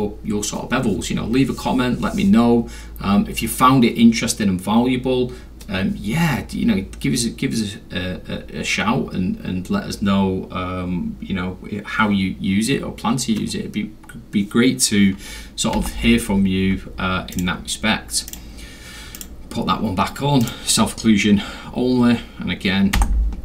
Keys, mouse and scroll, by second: 15.7 m, 17.3 click, 18.3 click, 20.4 click, 22.9 m.